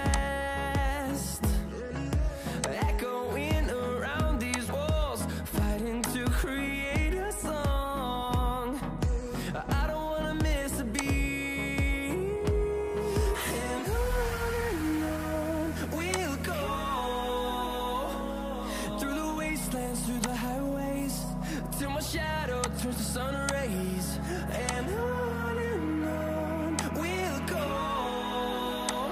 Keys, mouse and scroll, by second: 2.5 ctrl+click, 4.4 ctrl+click.